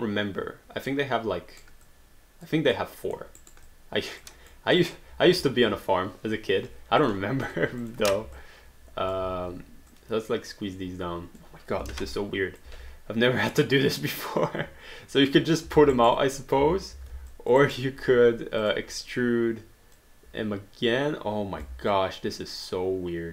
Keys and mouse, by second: 1.9 alt+click, 2.8 alt+middle click, 3.4 alt+right click, 3.7 alt+click, 4.5 alt+middle click, 5.3 q, 7.0 shift+click, 8.3 click, 9.2 r, 9.9 click, 12.3 alt+click, 12.7 w, 13.5 click, 15.8 alt+d, 16.0 alt+right click, 16.3 alt+click, 16.6 ctrl+z, 17.3 alt+click, 17.7 alt+right click, 18.6 click, 20.0 click, 21.9 alt+click.